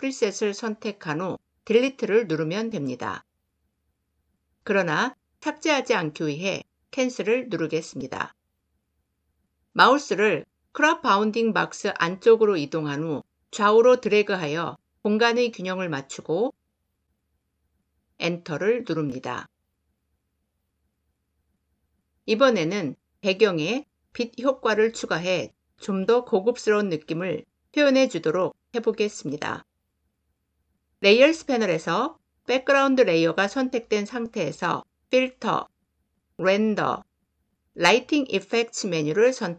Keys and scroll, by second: 17.9 Return.